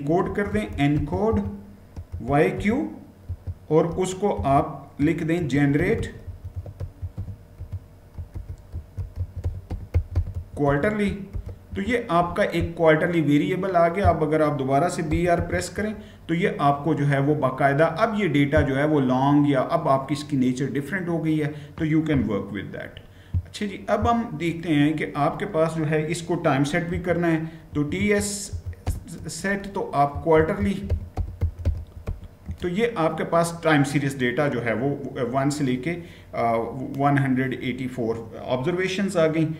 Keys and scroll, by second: 0.0-3.0 typing, 4.2-11.1 typing, 11.5 Return, 14.6-15.4 typing, 26.5-32.3 typing.